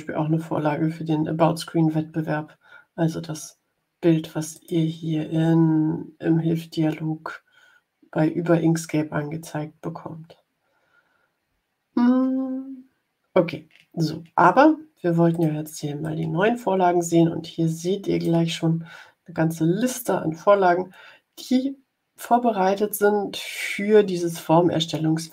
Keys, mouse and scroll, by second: 4.4 click, 15.2 click, 15.9-18.3 drag.